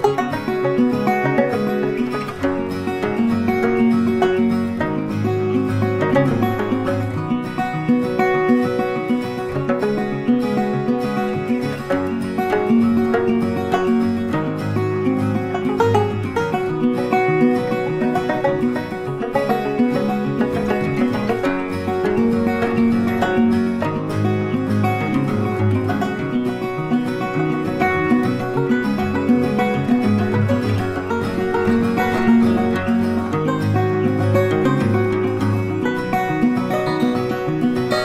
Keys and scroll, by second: 23.1 ctrl+d.